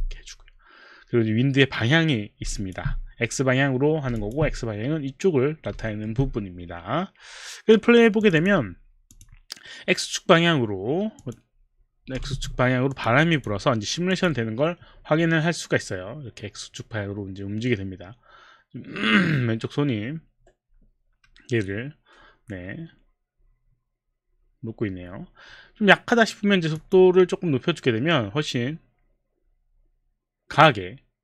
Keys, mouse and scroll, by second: 0.3 Return, 2.6 alt+click, 4.2 alt+click, 5.9 alt+middle click, 8.3 click, 9.1 click, 11.2 click, 12.3 Escape, 13.0 click, 13.4 click, 14.1 click, 26.7 click, 27.0 click.